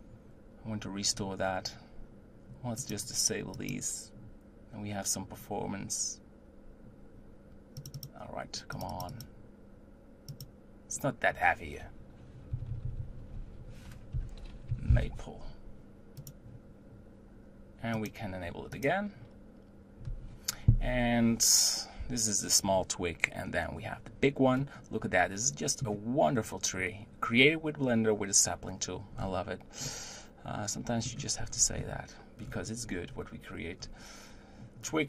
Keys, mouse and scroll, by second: 4.9-6.8 drag, 9.4-12.6 drag, 12.7 Left, 12.8 Left, 13.1 Left, 13.3 Left, 20.3-23.6 drag, 24.6-27.6 middle drag, 29.3-29.9 scroll down 2, 29.9-31.6 middle drag, 31.6-32.5 scroll up 5, 32.5-33.9 scroll down 7, 33.9-35.0 scroll up 2.